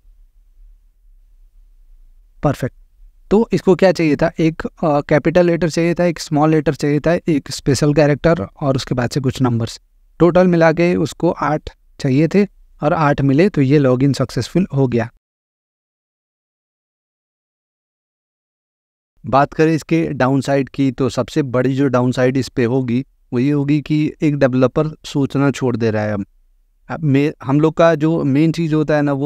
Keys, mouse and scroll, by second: 0.9 click, 11.4 click, 14.9 click.